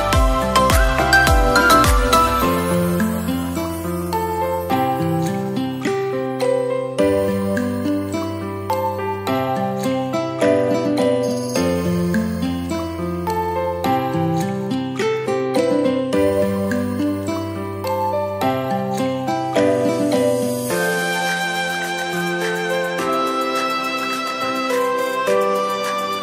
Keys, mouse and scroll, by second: 6.2 click, 7.1-7.5 scroll down 2, 7.5-8.1 middle drag, 8.1 s, 9.5 s, 10.3 Tab, 12.8 middle click, 13.8 click, 14.7 shift+click, 15.8 e, 16.9 click, 19.8-21.1 middle drag, 21.1 click, 21.8 shift+click, 22.4 shift+click, 23.4 ctrl+b.